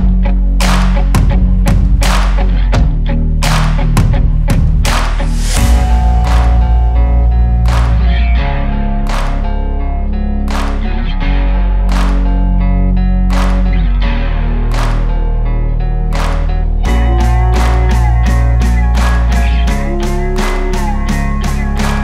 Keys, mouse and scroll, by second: 0.2 alt+a, 0.3 g, 0.4 alt+a, 0.9 click, 1.7 alt+a, 3.3 shift+right click, 3.7 click, 3.8 ctrl+s, 4.0 click, 4.3 shift+right click, 4.4 shift+s, 4.4 r, 4.8 alt+d, 5.0 x, 5.7-6.2 drag, 6.2 ctrl+Right, 6.3 ctrl+Right, 6.5 ctrl+Right, 6.7 g, 7.6 click, 8.8 shift+right drag, 9.0 alt+a, 9.6 click, 10.0 click, 10.3 click, 10.6 shift+Right, 10.6 shift+Right, 11.0 click, 11.2-13.6 shift+right click, 11.9 shift+right click, 13.2 shift+right click, 13.8 alt+a, 14.6-15.3 drag, 15.6 shift+right click, 15.9 click, 16.5 shift+right click, 16.7 shift+right click, 17.2 shift+right click, 17.5 shift+right click, 17.9 alt+a, 18.5 click, 19.8 click, 20.4-22.0 typing, 20.5 click, 20.7 shift+right click, 20.8 click.